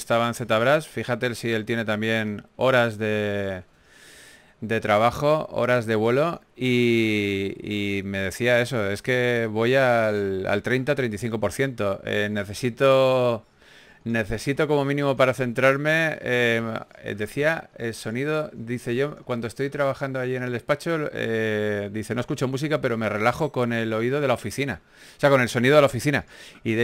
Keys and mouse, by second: 1.1 s, 2.5 ctrl+z, 3.1 ctrl+z, 3.3 ctrl+z, 4.0 g, 4.5 s, 6.1 click, 7.0 right click, 7.5 s, 8.4-10.8 drag, 10.8 a, 11.8 right click, 13.3 a, 13.5 a, 14.1 ctrl+a, 15.1 a, 16.7 click, 17.5 g, 17.7 f, 20.2 ctrl+z, 20.4 ctrl+z.